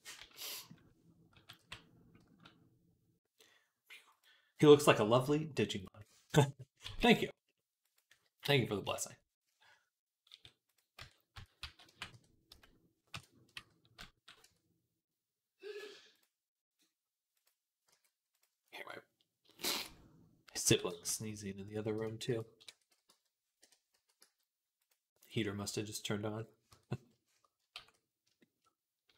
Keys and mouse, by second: 0.0 z, 0.3 click, 1.2 s, 3.9 click, 4.1-5.6 middle drag, 5.6 click, 5.7-9.5 middle drag, 6.7 g, 8.7 KP_3, 9.5-10.8 drag, 10.1 s, 10.8 Tab, 11.2 Tab, 11.4 a, 11.7 g, 14.3 Tab, 17.7 g, 18.2 click, 18.2-19.7 middle drag, 20.5 s, 22.1 Tab, 22.5 a, 22.9 z, 23.8 s, 24.6-26.5 drag, 26.5 Tab, 27.6 ctrl+s.